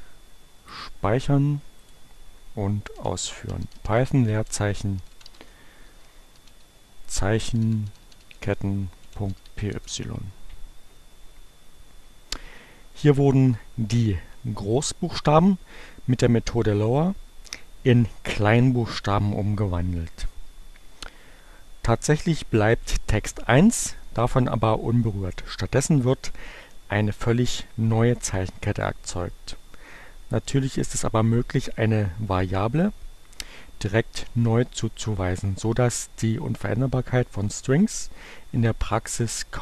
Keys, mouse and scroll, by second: 0.5 click, 1.7 click, 2.7-9.3 typing, 9.6 Return.